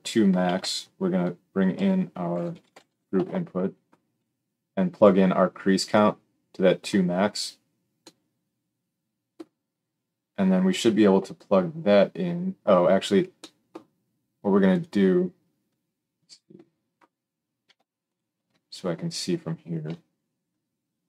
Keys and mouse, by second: 0.4 shift+a, 4.9-5.9 middle drag, 5.9-14.7 drag, 14.7-16.9 middle drag, 18.0 alt+shift+click, 19.8 KP_7.